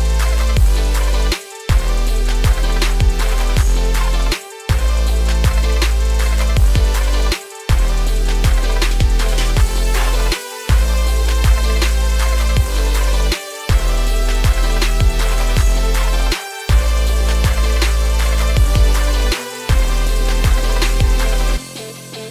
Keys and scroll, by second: 4.3 ctrl+a, 13.3 ctrl+space, 20.7 ctrl+z.